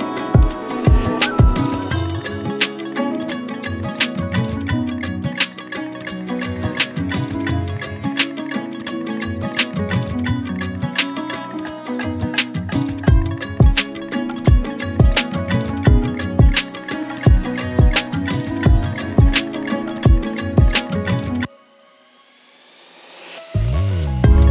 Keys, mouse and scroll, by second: 0.0 scroll down 5, 0.3-0.7 middle drag, 0.7-1.4 scroll up 1, 1.4-1.9 scroll down 1, 1.9 click, 2.4 middle click, 3.5 Tab, 4.6-6.8 typing, 8.3 s, 9.9 g, 10.8 middle click, 11.2-11.5 scroll up 7, 11.5 Tab, 11.6-12.1 middle drag, 12.1-12.5 scroll down 8, 12.5 shift+middle click, 13.3 KP_1, 13.5 shift+middle click, 13.6-14.5 scroll up 6, 13.7 shift+middle click, 14.5 shift+a, 15.6 drag, 15.9 Tab, 16.1 z, 16.4-17.0 scroll up 5, 16.5 shift+middle click, 17.0 click, 17.6 shift+d, 18.1 p, 18.7 Tab, 18.8 click, 19.2 Tab, 19.4 Tab, 19.5-20.3 drag, 20.7 Tab, 20.9 g, 22.0 Tab, 22.1 click, 22.5 g, 23.5-24.5 typing.